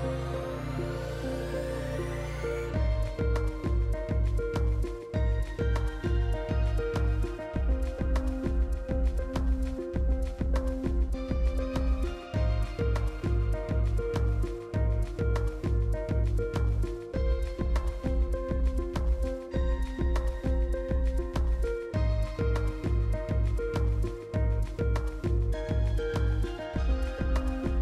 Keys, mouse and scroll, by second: 7.9 Delete, 8.4 click, 8.7 Delete, 9.0 click, 9.2 Delete, 9.7 click, 10.1 Delete, 10.8 click, 11.1 Delete, 11.8 click, 12.3 Delete, 13.7 click, 14.4 Delete, 17.1 ctrl+d, 18.5-21.1 drag, 23.6-25.0 typing, 25.8-27.8 drag.